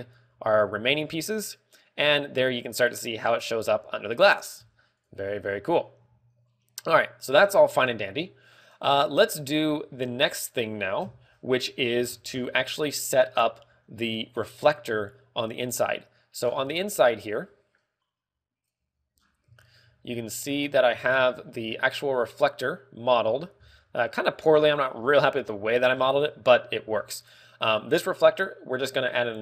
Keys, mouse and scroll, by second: 0.5 alt+h, 5.1 ctrl+w, 6.6 a, 8.2-8.6 scroll down 6, 17.5 middle click, 19.2 click, 19.8-20.4 scroll down 3, 20.2 shift+middle click, 20.8 middle click, 21.2-22.0 scroll up 4, 21.4 z, 21.6 shift+middle click, 22.3 middle click, 23.2 right click, 23.8-24.4 scroll up 7, 24.5 middle click, 25.2 shift+middle click, 25.5-26.0 scroll down 4, 25.8 middle click, 26.6 shift+middle click.